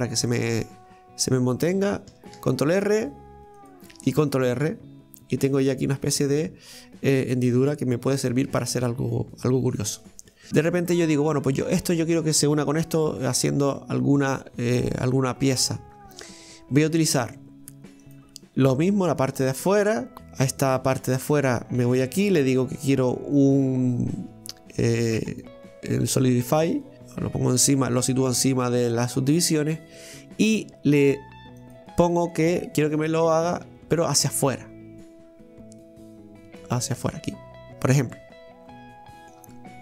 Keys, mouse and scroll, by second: 0.3 middle click, 0.9-2.4 scroll up 1, 2.4 ctrl+r, 5.9-6.2 scroll down 2, 6.2 middle click, 6.8-7.2 scroll down 1, 7.2-11.0 middle drag, 11.0 right click, 12.9 Tab, 16.9 right click, 18.0 click, 19.1 right click, 19.4 alt+shift+right click, 19.6 alt+shift+right click, 20.1 Tab, 20.6 right click, 21.9-24.9 drag, 26.9 click, 31.6 click, 33.1-36.1 drag, 37.5-38.0 scroll up 2, 38.0-39.4 middle drag, 39.4 Tab.